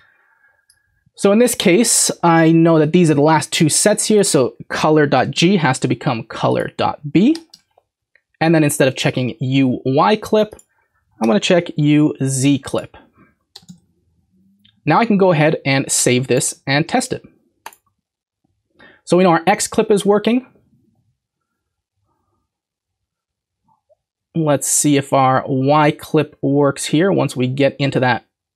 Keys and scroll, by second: 5.1 BackSpace, 7.3 BackSpace, 7.5 b, 11.2 BackSpace, 13.5 BackSpace, 16.7 ctrl+s.